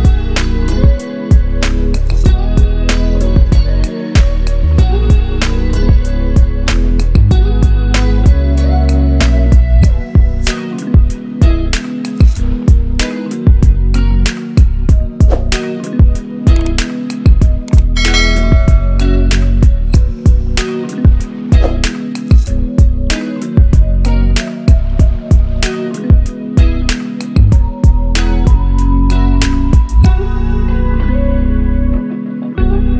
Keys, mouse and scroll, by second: 3.8 click, 6.0 click, 9.3-9.8 scroll up 1, 9.8 click, 10.0 scroll up 1, 10.7-11.7 drag.